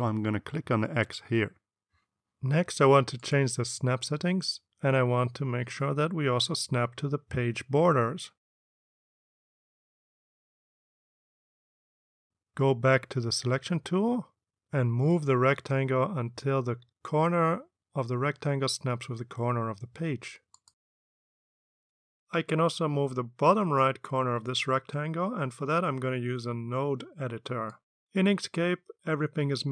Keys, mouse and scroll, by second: 3.3 click, 9.7 click, 15.1 click, 17.4-21.4 drag.